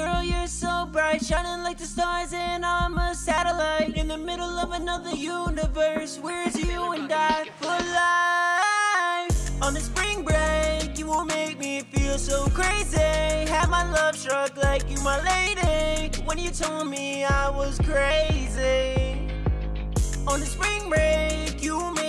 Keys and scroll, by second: 0.0-0.4 typing, 2.9 typing, 3.0 Return, 5.3-6.0 typing, 7.0 super+s, 7.7 ctrl+super+w, 8.1 super+Tab, 14.8 super+Tab.